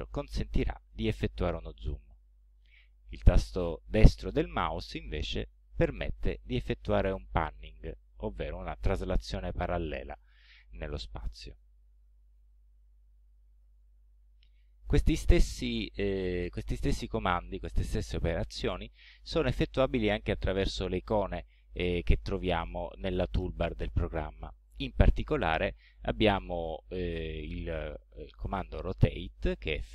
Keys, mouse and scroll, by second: 1.0-1.7 scroll down 4, 2.0-2.6 scroll up 4, 5.0-10.4 right drag, 11.5-11.8 scroll down 1, 12.2 scroll up 1, 12.8 scroll up 1, 13.5 scroll down 2, 29.2 click.